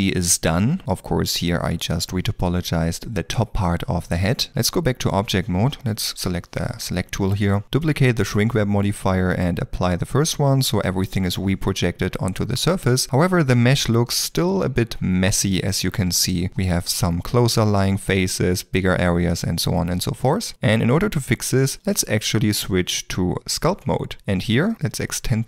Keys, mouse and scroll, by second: 4.5 Tab, 12.2 shift+middle click, 13.0 ctrl+middle click, 14.7 Tab, 19.3 middle click, 19.9 shift+middle click.